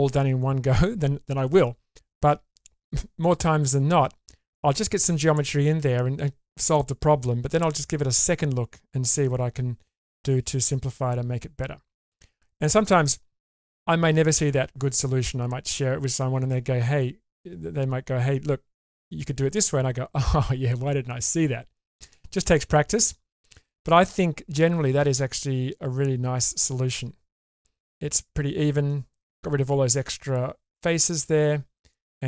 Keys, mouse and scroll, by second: 10.3-13.1 middle drag, 23.9-28.9 middle drag, 29.3 scroll down 1, 30.1-32.1 middle drag.